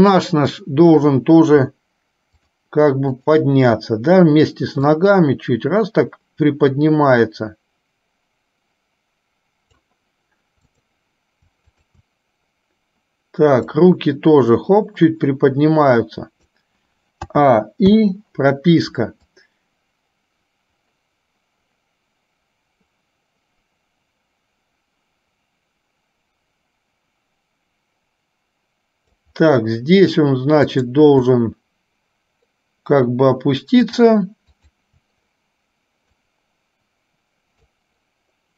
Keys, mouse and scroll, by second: 2.4 shift+click, 3.3 shift+click, 5.3-10.0 drag, 10.8 click, 11.9 shift+click, 14.1-16.8 drag, 17.5 a, 19.5-29.4 drag, 30.8 click, 33.9 shift+click, 34.8 shift+click, 36.5-38.0 drag.